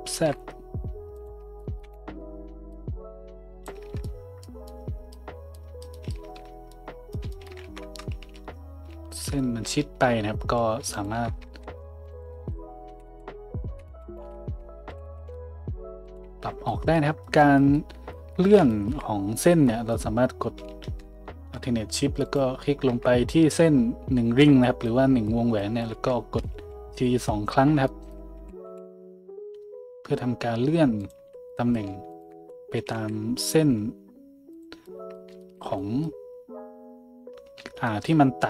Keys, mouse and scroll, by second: 2.7-10.8 drag, 3.8 Tab, 6.2 Tab, 7.6 `, 8.2 a, 10.9 alt+shift+middle click, 12.1 alt+shift+middle click, 12.9 f, 13.1 f, 13.9 ctrl+z, 14.2 ctrl+z, 14.2-16.0 ctrl+drag, 14.9 g, 16.2 a, 16.7-31.1 drag, 22.2 alt+shift+middle click, 22.2 alt+shift+right click, 28.3 g, 31.1 middle click, 31.2 a, 31.9 alt+shift+middle click, 32.1 alt+shift+click, 32.2 alt+shift+middle click, 32.8 g.